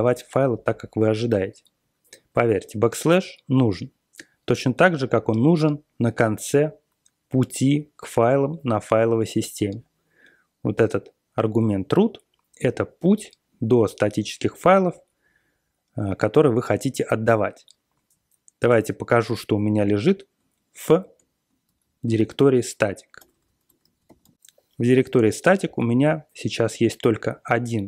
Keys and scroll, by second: 21.6 ctrl+x, 22.1 ctrl+f, 23.1-24.7 typing.